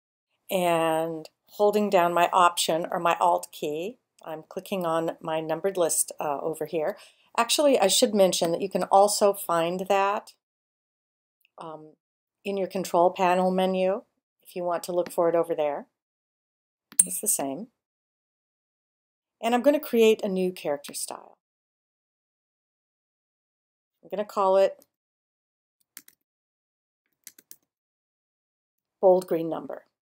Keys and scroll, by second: 24.4-29.2 typing.